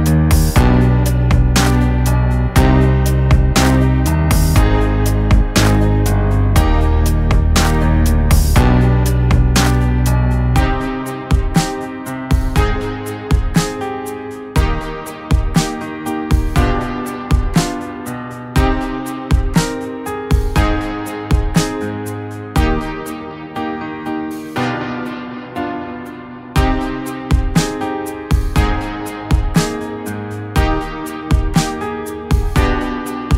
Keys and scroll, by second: 2.1 g, 11.5 g, 15.4 g, 20.4 g, 28.7 g, 29.3 g.